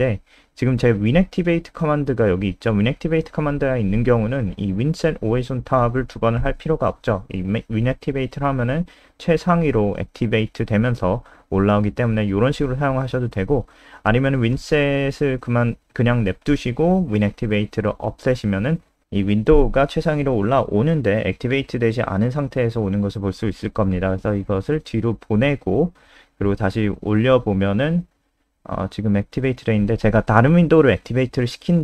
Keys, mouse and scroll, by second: 9.4 click, 10.9 Delete, 11.2 BackSpace, 12.2 ctrl+z, 12.4 ctrl+z, 18.0 click, 18.9 Down, 19.1 shift+Home, 19.3 shift+Home, 19.8 ctrl+s, 20.7 click, 23.3 KP_0, 31.1 click.